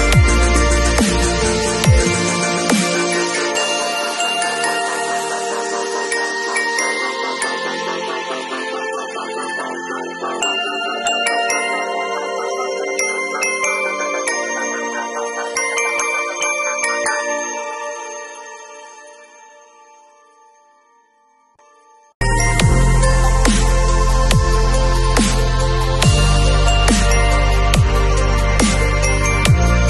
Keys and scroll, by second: 1.1 super+t, 1.8 alt+super+t, 4.3 super+u, 24.8 super+i, 26.1 super+v.